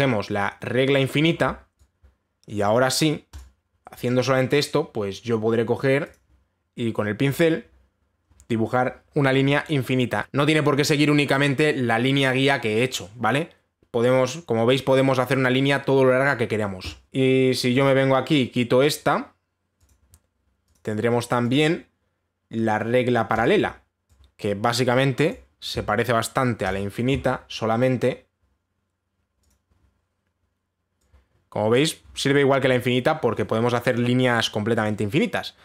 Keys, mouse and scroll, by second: 0.6 click, 1.6 click, 3.2 click, 4.0 click, 6.7 click, 17.1 click, 20.5 click, 21.4 click, 22.2 click, 24.0 click, 25.9 click, 27.3 click, 30.1 click, 32.7 click.